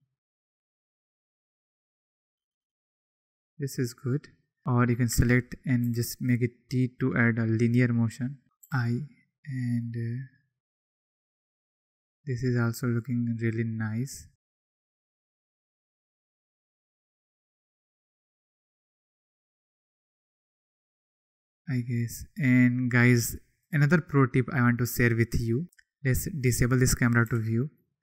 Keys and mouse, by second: 3.7-4.6 drag, 4.9 click, 5.1 a, 5.8 t, 7.5 click, 8.6 i, 18.2-19.5 drag, 23.7-24.8 drag, 26.3 click, 27.2 n, 27.4 click, 27.8-28.0 drag.